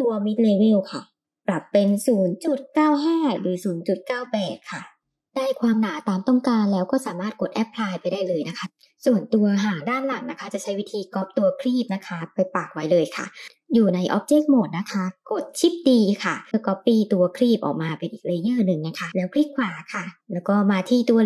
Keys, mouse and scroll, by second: 0.8-2.5 middle drag, 3.4 click, 3.9 click, 4.4 click, 4.8 click, 5.6 middle click, 6.6-7.2 drag, 7.6-8.6 middle drag, 12.4 Tab, 13.5 Tab, 15.3 shift+d, 20.8-21.2 middle drag.